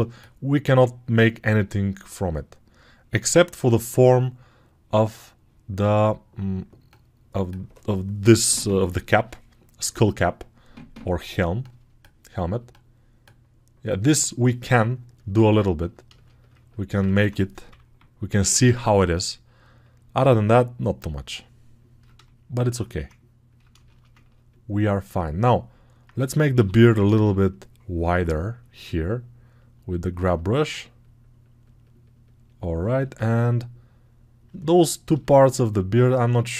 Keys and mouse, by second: 15.1-32.9 alt+drag, 17.6 [, 18.1 [, 26.4 g, 26.8 ], 27.0 ], 32.9-34.7 alt+right drag, 34.7 alt+click, 35.0 alt+shift+right click.